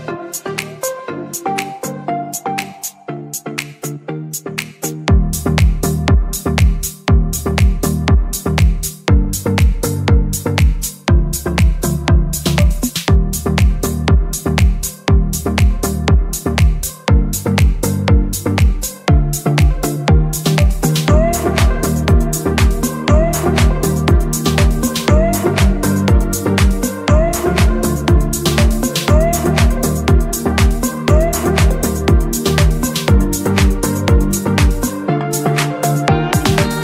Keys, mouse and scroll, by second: 0.0 click, 1.3 click, 3.3 click, 10.1-10.5 middle drag, 10.6-10.9 scroll down 2, 11.1 middle click, 11.8 shift+a, 14.1 click, 15.3-16.2 drag, 17.5 g, 18.1 z, 20.3 click, 20.8 s, 22.0 click, 22.8 click, 29.9-31.4 drag, 32.9 g, 33.7 z.